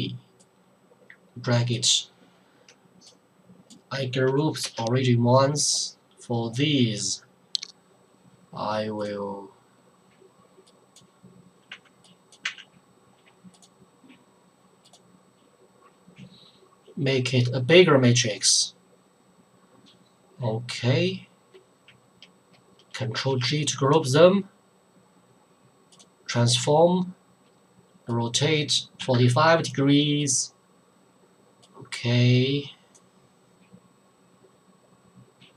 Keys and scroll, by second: 4.6 ctrl+g, 11.7 2, 12.4 2, 23.1 ctrl+g, 29.0 KP_4, 29.1 KP_5.